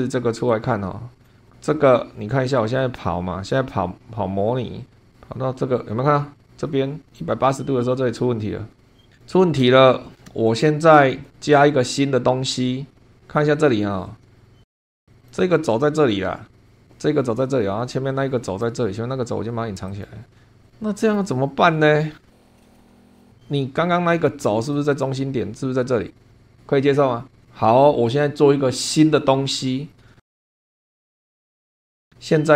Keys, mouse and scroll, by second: 0.4-1.3 drag, 2.5-9.1 drag, 9.2 scroll down 1, 9.7 scroll up 2, 10.4 shift+middle click, 12.9 scroll down 2, 14.6 click, 15.1 click, 18.4 click, 19.8 click, 20.6 click, 20.9 click, 22.6 shift+middle click, 23.0 click, 23.2 scroll up 1, 24.7 click, 28.8 click, 29.7 scroll down 1, 30.2 shift+click, 30.5 shift+scroll down 1, 30.8 shift+click, 30.9 shift+middle click, 31.2 middle click, 32.0 middle click, 32.4-32.5 scroll up 1.